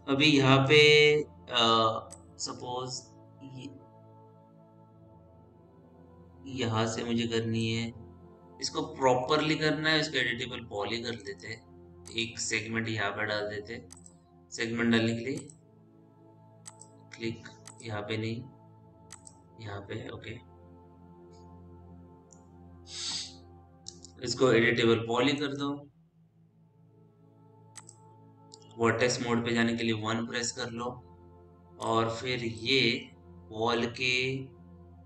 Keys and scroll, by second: 30.4 1.